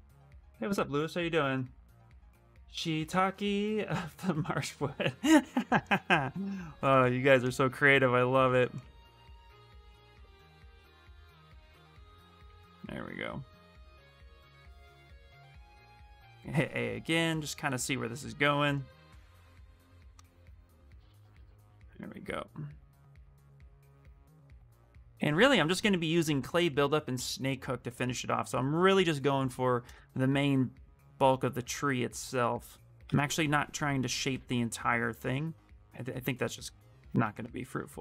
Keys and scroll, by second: 12.5 w, 15.9 a, 17.6 a, 32.2 q, 34.2 w.